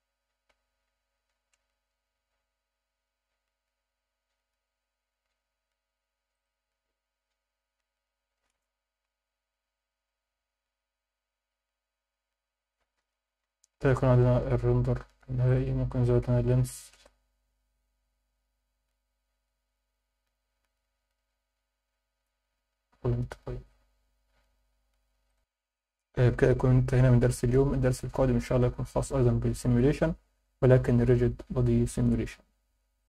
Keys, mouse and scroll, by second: 6.9 click, 15.4-18.4 drag.